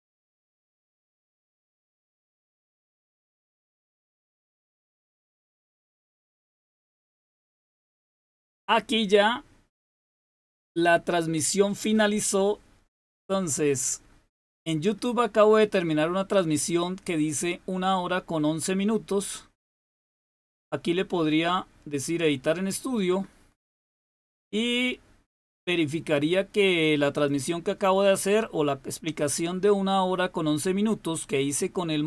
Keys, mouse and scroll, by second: 19.7 click, 27.1 click, 27.6 click.